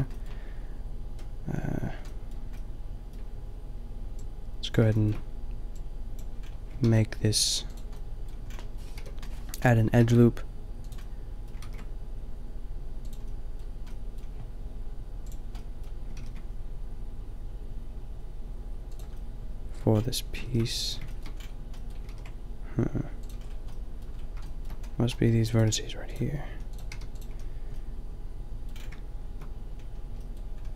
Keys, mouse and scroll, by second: 2.4 middle click, 6.8 ctrl+r, 8.9 KP_5, 9.9 ctrl+r, 11.7 ctrl+r, 13.0 click, 13.3 click, 14.1 click, 14.4-14.8 middle drag, 16.2 ctrl+r, 19.3-23.2 middle drag, 20.4 ctrl+r, 22.1 ctrl+r, 25.7 g, 26.5 a, 26.8 g, 27.2 a.